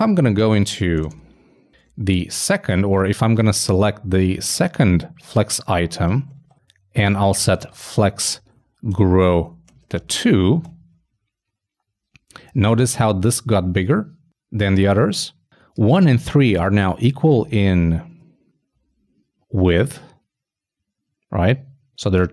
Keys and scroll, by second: 1.4-2.3 typing, 9.3 shift+Return, 9.5 shift+;, 9.7 shift+space, 18.1 shift+super+f.